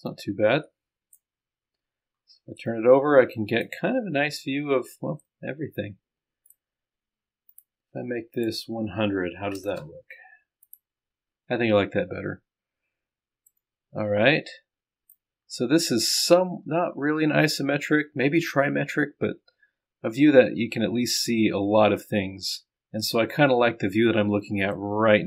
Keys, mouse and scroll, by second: 2.7-3.7 drag, 3.8-4.5 scroll down 1, 5.2 middle click, 5.3-6.5 drag, 9.6 KP_0, 9.8 KP_0, 10.7 click, 12.2-13.4 scroll up 1, 13.5 middle click, 13.6-15.2 right drag, 15.2 click, 15.4-16.5 scroll down 1, 16.5-18.7 scroll up 1, 18.7-19.0 scroll up 1.